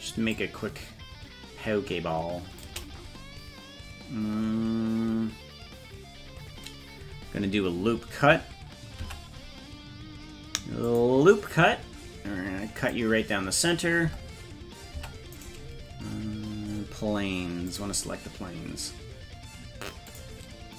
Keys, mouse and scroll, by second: 0.4-2.7 shift+drag, 10.9 click, 12.8 click, 14.1 Tab, 15.4 right click, 17.7 click, 20.1 click.